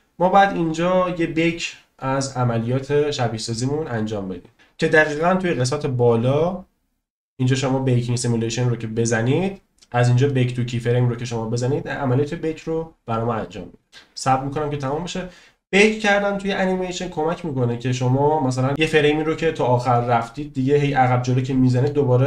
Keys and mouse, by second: 5.7 click, 10.2-22.2 drag.